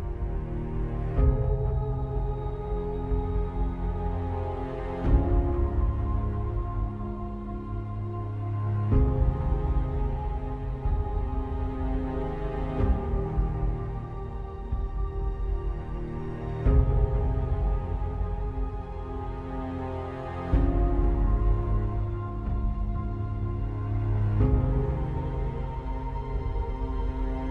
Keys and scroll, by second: 0.5 alt+space, 4.7 ctrl+alt+h, 10.7 alt+Return, 11.7 alt+space.